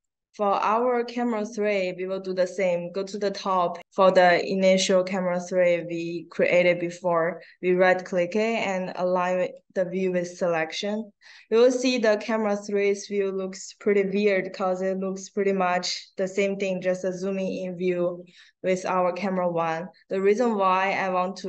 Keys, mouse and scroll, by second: 0.6 right click, 4.0 click, 5.5 click, 8.6 click, 20.2-21.4 right drag.